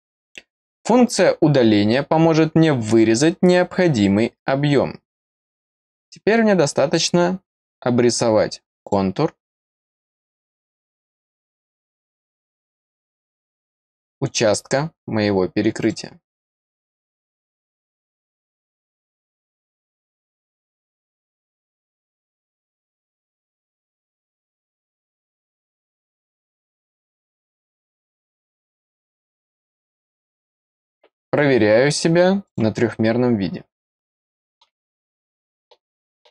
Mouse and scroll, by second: 5.3 click, 8.7 click, 11.2 click, 15.7 click, 17.2 click, 18.7 click, 19.8 click, 20.6 click, 21.6 click, 22.8-24.0 drag, 25.2 click, 26.3 click, 28.1 click, 29.7 click, 32.4 click, 33.8 middle click, 35.3 middle click.